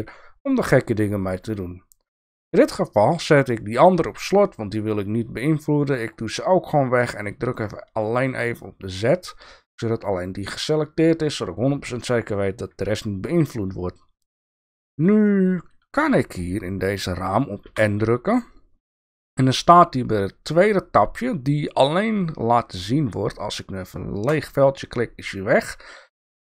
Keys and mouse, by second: 3.7 click, 5.8 drag, 8.0 click, 17.6 n, 24.3 click.